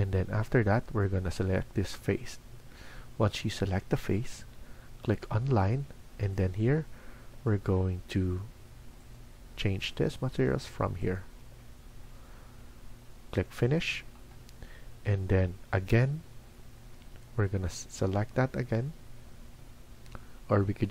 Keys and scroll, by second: 7.2 Escape, 11.3 Escape.